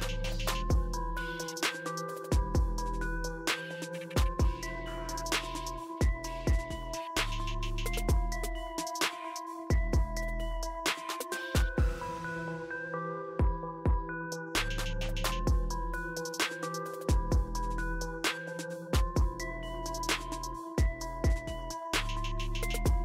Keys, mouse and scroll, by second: 2.8 right click, 4.3 click, 10.6-14.2 drag, 11.6-12.5 typing, 14.7-16.2 drag, 19.3 typing.